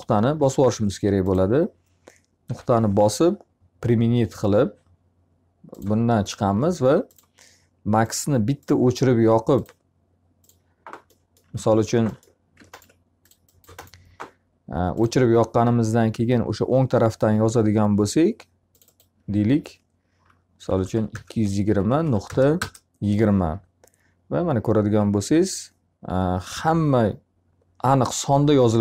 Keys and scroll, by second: 1.9 Delete, 11.1 t, 11.5 z, 20.1 2, 20.9 0, 21.5 Delete, 21.9 2, 22.2 0, 22.4 Return.